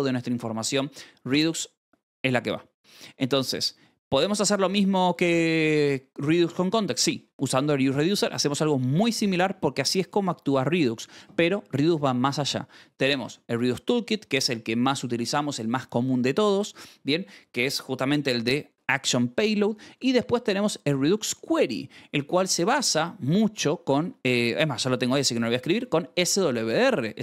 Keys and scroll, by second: 3.9-5.4 typing, 6.7-11.0 typing, 10.1 Escape, 12.5 Escape, 12.7-13.7 typing, 20.3 j, 20.9 shift+v, 23.1 o, 23.9 Escape, 24.9 u, 25.6 shift+v, 26.8 Escape, 27.1-27.2 typing.